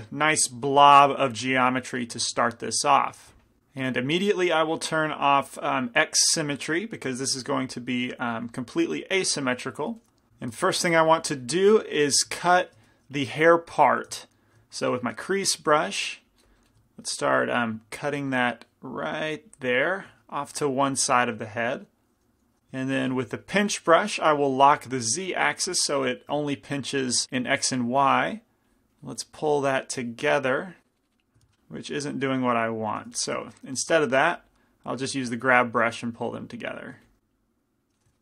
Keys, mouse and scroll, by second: 4.6-10.3 drag, 6.9-9.7 middle drag, 10.7 shift+c, 10.9 f, 11.9-17.7 middle drag, 13.1 shift+f, 15.3 shift+f, 17.7-21.6 drag, 20.1-22.6 middle drag, 22.6 p, 22.9 f, 23.5-27.8 middle drag, 24.9-27.8 drag, 25.7 f, 27.8 f, 28.4-32.0 drag, 29.4-30.9 middle drag, 31.5 ctrl+z, 33.1 g, 33.2 f, 33.4-38.2 drag, 37.1 f.